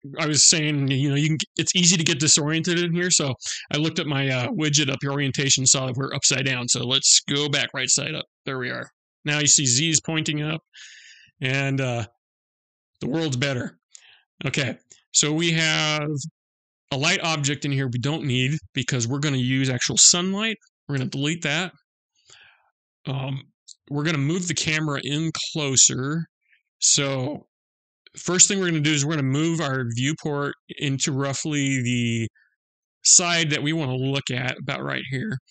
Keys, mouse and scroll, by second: 5.8 middle click, 7.8 middle click, 14.6-15.8 scroll down 11, 18.1 click, 20.4 Delete, 21.8-23.7 scroll up 12, 24.3-25.1 scroll up 3, 25.1-26.2 scroll down 1, 26.2 scroll down 1, 27.0-28.2 scroll up 1, 28.2 middle click, 29.8-30.2 scroll up 1, 30.2 middle click.